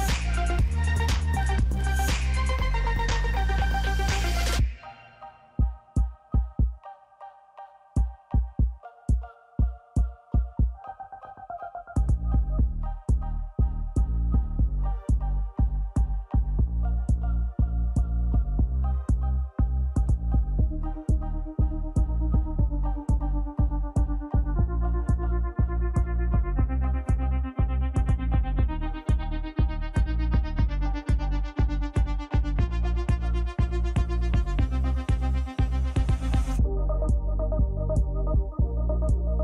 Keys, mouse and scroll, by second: 0.2 shift+click, 1.5 ctrl+g, 7.6 shift+click, 8.8 ctrl+g, 12.7 shift+click, 13.9 ctrl+g, 27.1 Down, 27.5 Down, 27.9-28.5 Down, 28.9 Down, 29.1 Down, 29.4 Down, 29.7 Down, 30.0 Down, 30.3 Down, 30.5 Down, 30.8 Down, 31.1 Down, 31.4 Down, 31.7 Down, 32.3 Down, 32.7 Down, 33.1 Down, 33.6 Down, 34.2 Down, 34.4 Down, 34.8 Down.